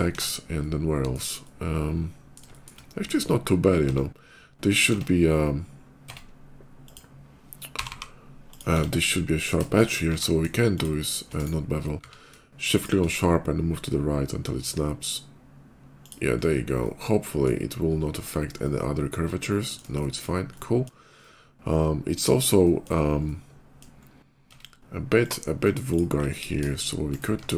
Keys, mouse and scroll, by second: 0.0 Tab, 0.4 middle click, 1.3 middle click, 2.3 shift+middle click, 2.8 shift+middle click, 2.9 shift+middle click, 3.6 Tab, 6.6 click, 7.6 g, 8.3 click, 8.3 g, 8.5 Tab, 8.8 middle click, 9.9 q, 10.5 shift+q, 10.6 click, 11.1 right click, 11.8 q, 12.6 click, 15.9 click, 16.2 scroll down 1, 16.5 middle click, 17.5 scroll up 1, 17.6 middle click, 18.0 middle click, 18.3-19.6 middle drag, 19.8 shift+middle click, 20.4 shift+middle click, 21.0-22.2 shift+middle drag, 22.4 shift+middle click, 23.0 shift+middle click, 24.3 Tab, 24.5 middle click, 25.0 click, 25.7 ctrl+click, 26.0 ctrl+b, 26.6 ctrl+shift+b, 27.1 Tab, 27.4 middle click.